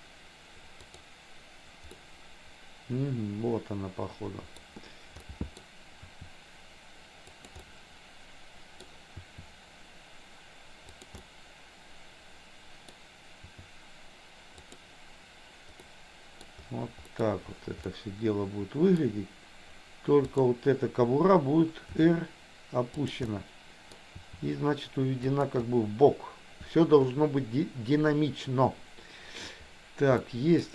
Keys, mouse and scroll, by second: 0.8 click, 1.9-4.7 middle drag, 5.2 middle click, 6.0 r, 7.6-9.0 middle drag, 9.2 r, 11.2-13.1 middle drag, 13.4 r, 15.8 middle click, 17.1 middle click, 17.9-19.0 middle drag, 20.3 click, 22.0 r, 23.2 middle click, 24.2 r, 30.2 middle click.